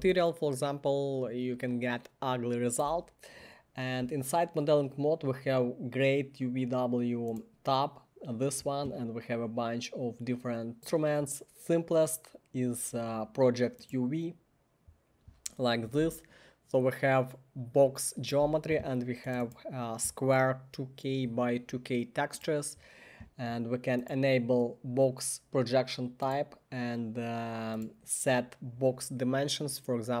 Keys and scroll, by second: 30.1-30.2 typing.